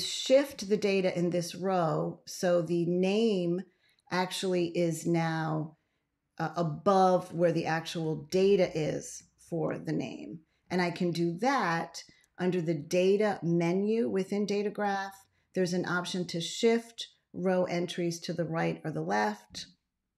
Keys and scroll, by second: 9.3 ctrl+x.